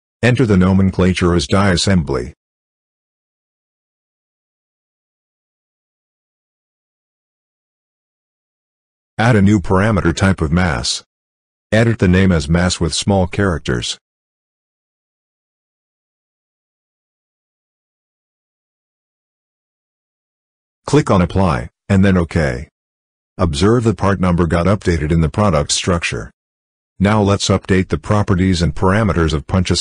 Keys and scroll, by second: 0.8-4.1 typing, 12.9 m, 13.5 a, 25.6 ctrl+c.